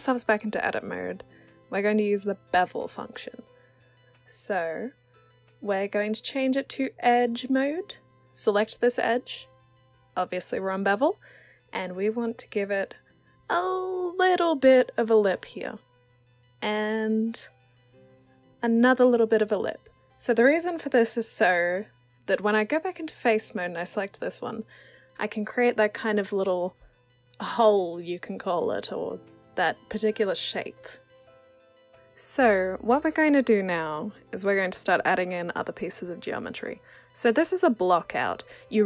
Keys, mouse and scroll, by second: 2.1-5.6 drag, 6.1 alt+click, 7.4 click, 9.4-10.7 drag, 15.0 click, 16.2 click, 16.3 click, 18.6 click, 21.8 click, 22.8 click, 23.7 click, 24.5 w, 25.1 click, 27.9-30.4 alt+drag, 32.3-37.2 drag, 37.5 w, 38.0 alt+click, 38.3 e.